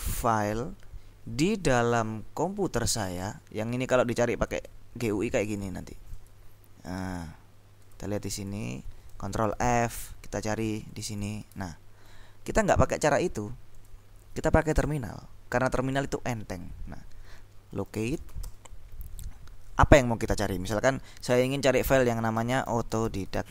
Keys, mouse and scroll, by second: 4.6 click, 6.2 click, 8.0-9.1 drag, 9.6 ctrl+f, 10.9 click, 11.7 alt+Tab, 13.9 click, 17.6-18.9 typing, 22.2-23.5 typing.